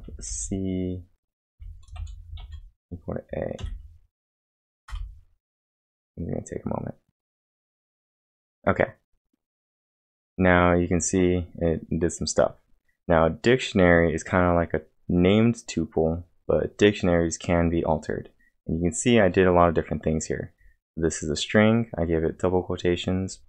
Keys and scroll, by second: 0.1 shift+c, 1.3-3.6 typing, 4.9 Return.